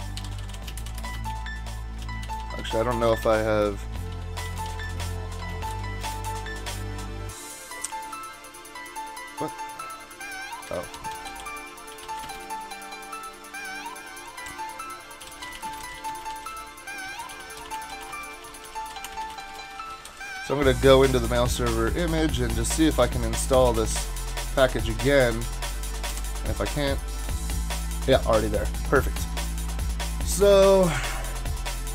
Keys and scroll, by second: 0.0-6.3 typing, 10.6 Up, 10.6-12.9 typing, 15.0-20.9 typing, 22.4-25.7 typing, 26.1 Return, 29.2 super+Tab.